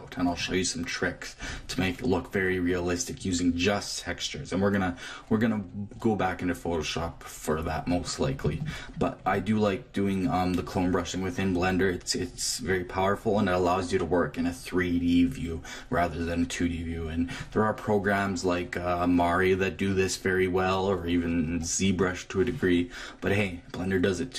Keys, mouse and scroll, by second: 8.4 click, 12.1-15.7 middle drag, 15.8 middle click.